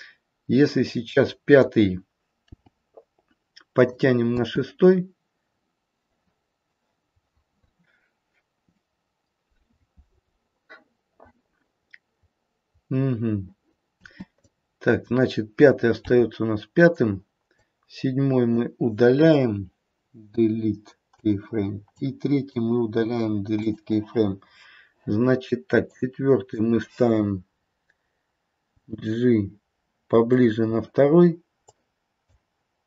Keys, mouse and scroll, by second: 0.9 click, 2.5 g, 4.3 space, 14.0 space, 14.3 click, 16.0 g, 17.4 click, 20.4 Delete, 21.8 click, 22.9 Delete, 25.8 click, 28.7 g, 31.6 click, 32.7 click.